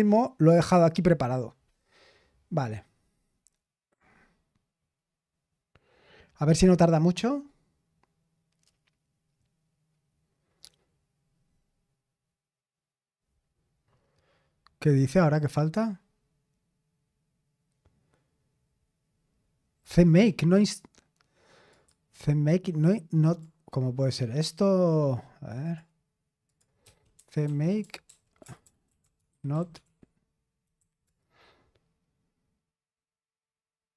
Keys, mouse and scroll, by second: 14.6-15.0 scroll up 1, 17.1-17.5 scroll down 1, 19.5-20.0 scroll down 1, 21.7 click, 23.2 click, 25.6 click, 25.9 click, 26.6 click, 26.8-31.0 typing.